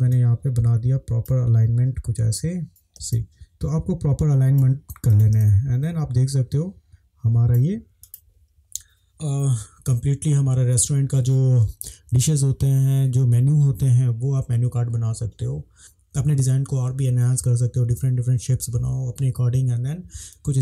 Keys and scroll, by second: 3.0 space, 5.4 space.